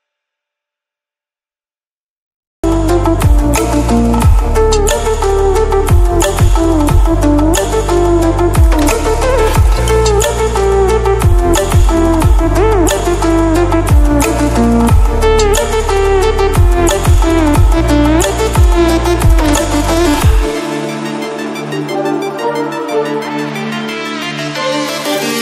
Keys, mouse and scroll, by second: 1.0-4.4 drag, 4.4 scroll up 1, 4.8-6.2 drag, 6.2-6.6 scroll down 1, 8.3 Down, 10.1 ctrl+Left, 11.2 click, 11.6 scroll down 1, 12.6 scroll up 1, 15.2 click, 16.2-16.7 scroll up 1, 16.7-20.4 drag, 20.4-21.1 scroll down 1, 21.8 click, 22.4-22.7 scroll up 1, 23.8 click, 25.0 scroll down 1.